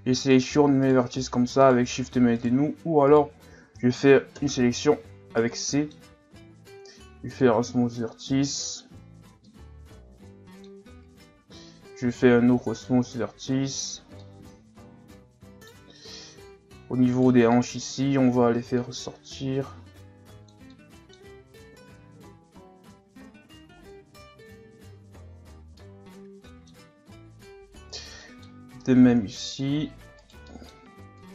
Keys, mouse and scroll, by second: 0.3 shift+right click, 0.8 shift+right click, 1.6 shift+right click, 2.4 shift+right click, 3.1 shift+right click, 4.4 ctrl+KP_Add, 5.3 scroll down 1, 5.6 middle click, 6.5 w, 8.4 middle click, 9.0 Tab, 9.5-11.3 middle drag, 11.3 Tab, 12.0 w, 13.7 Tab, 14.2-16.0 middle drag, 16.0 Tab, 17.1 right click, 17.5-18.8 middle drag, 18.8-20.7 drag, 20.7-21.7 middle drag, 21.7 KP_1, 22.8 Tab, 23.6-24.6 scroll down 4, 24.6-25.3 scroll up 3, 25.3-25.8 scroll down 1, 25.8-27.3 middle drag, 27.3 scroll up 1, 27.4 Tab, 27.9 right click, 28.2 middle click, 28.8-30.2 drag, 30.2 right click, 30.4 middle click, 31.2 click.